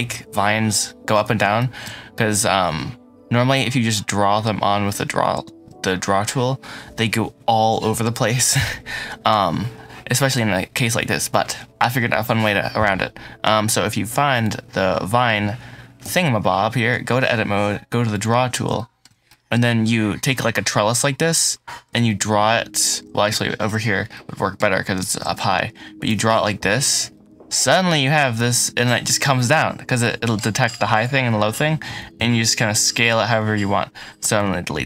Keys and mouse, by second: 1.5 shift+middle drag, 2.0 middle click, 11.0-12.0 middle drag, 14.2 click, 14.9 middle click, 15.9 Tab, 18.6 shift+middle click, 19.1 middle click, 21.9 shift+middle click, 23.2 shift+middle click, 23.7 middle click, 24.0 middle click, 25.9 click, 27.0 middle click, 27.8-29.9 middle drag, 29.9 click, 31.8 s, 32.1 z, 33.5 Escape, 34.1 Delete.